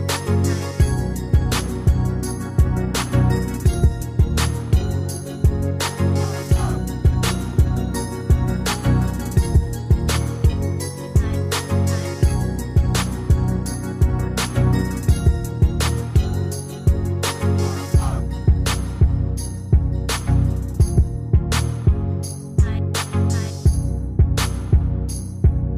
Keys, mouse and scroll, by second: 8.3 Return, 10.3 alt+Tab, 11.6 alt+click.